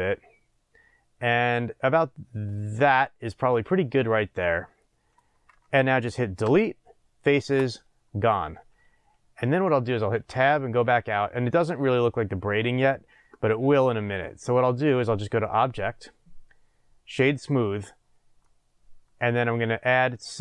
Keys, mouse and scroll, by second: 6.4 Delete, 10.1 Tab, 11.2-15.4 middle drag, 15.4-18.4 drag, 18.4-20.4 middle drag, 19.5-20.4 scroll up 2.